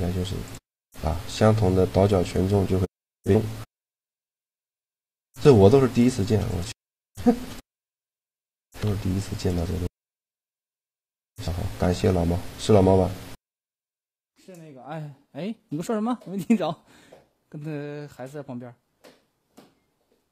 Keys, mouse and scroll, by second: 1.1-2.6 drag, 2.6-9.1 middle drag, 3.4-6.8 drag, 3.4-9.1 right drag, 8.2-9.7 drag, 8.6 g, 9.9 Tab, 10.6 Tab, 11.6 a, 15.2 a, 15.3 a, 16.4 a, 18.0-19.5 drag, 18.8 Tab, 18.9 Tab.